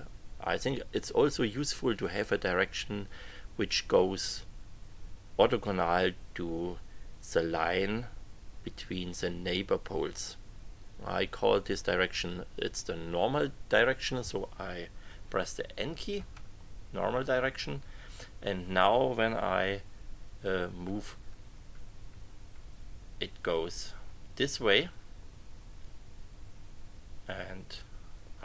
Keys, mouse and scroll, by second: 16.1 n, 20.2 Page_Up, 23.7 Page_Up.